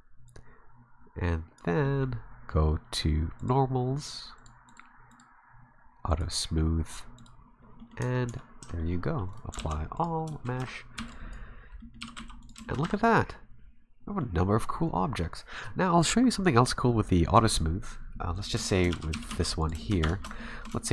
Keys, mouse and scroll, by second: 0.3 click, 1.8 middle click, 3.4 click, 4.4 click, 4.7 click, 5.1 click, 6.1 click, 7.2 click, 7.8 middle click, 8.0 Tab, 8.3 Tab, 8.4 scroll down 6, 8.6 a, 8.8 middle click, 9.3 right click, 9.6 alt+c, 10.3 shift+middle click, 10.6 a, 11.0 b, 11.5 scroll down 3, 11.8 middle click, 12.0 g, 12.6 middle click, 12.8 a, 13.0 middle click, 14.4-15.0 scroll up 3, 18.4 right click, 18.6 shift+middle click, 18.9 shift+d, 19.1 g, 19.8 shift+middle click, 20.0 Tab, 20.1 scroll up 3, 20.4 shift+middle click, 20.8 shift+middle click.